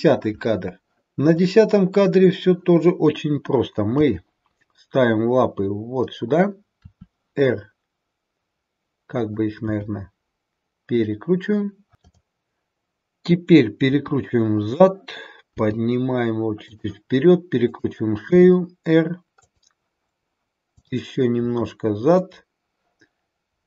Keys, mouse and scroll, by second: 1.3 click, 3.8 g, 6.8 r, 9.6 g, 12.0 click, 13.8 r, 15.5 g, 17.6 click, 18.2 r, 21.3 click, 21.5 r.